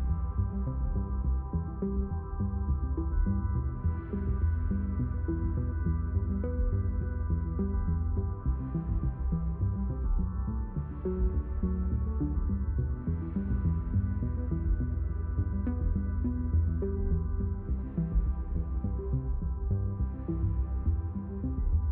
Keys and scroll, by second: 0.7 w, 7.0 d, 8.1 w, 9.3 e.